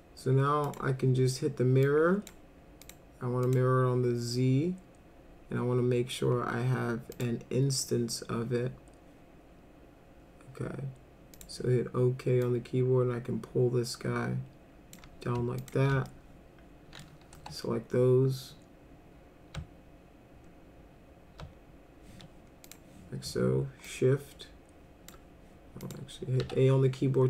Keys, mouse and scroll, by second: 0.6 click, 1.9 click, 2.8 click, 3.4 click, 7.2 click, 11.4 click, 12.4-15.0 drag, 15.6 ctrl+click, 16.1 alt+middle click, 17.4 e, 22.7 click, 23.9-25.1 shift+drag, 25.8 click, 26.4 a.